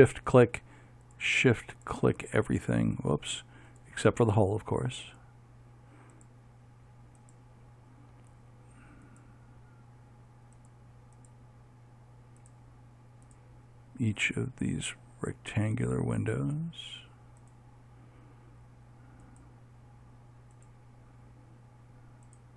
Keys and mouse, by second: 3.0-5.2 middle drag, 5.2-22.5 right drag.